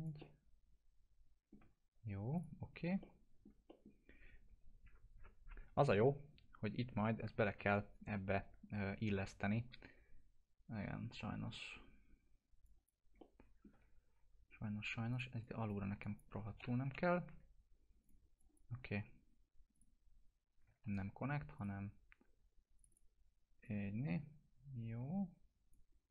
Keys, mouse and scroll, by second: 0.2-2.4 alt+middle drag, 2.3 click, 3.0-3.6 alt+middle click, 3.7 middle click, 3.9 scroll down 1, 12.6 click, 13.2-13.8 alt+middle drag, 15.1 click, 16.0 alt+click, 16.8 Delete, 18.0 click, 20.8 ctrl+z, 21.6-25.8 drag.